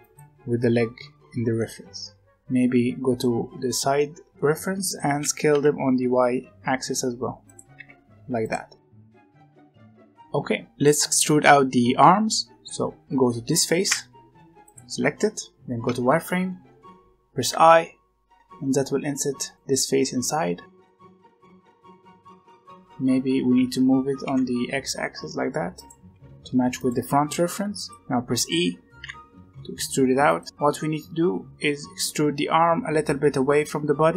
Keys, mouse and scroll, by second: 1.5-3.2 middle drag, 3.2-3.9 scroll down 1, 3.9 shift+middle click, 4.5-5.1 scroll up 1, 5.1 s, 7.7 g, 8.9 scroll down 1, 8.9 middle click, 9.5 z, 9.7 Tab, 9.9 alt+a, 10.7 middle click, 10.8 click, 11.2-13.7 middle drag, 13.7 3, 14.6 click, 15.2 middle click, 15.5-16.0 scroll up 1, 16.0 z, 20.6 middle click, 21.5-22.7 middle drag, 22.7-23.5 scroll up 1, 23.5 g, 25.9 r, 26.9 g, 27.9 g, 28.9 e, 30.4 scroll down 5, 30.5-31.5 scroll up 2, 31.5-33.7 scroll up 1.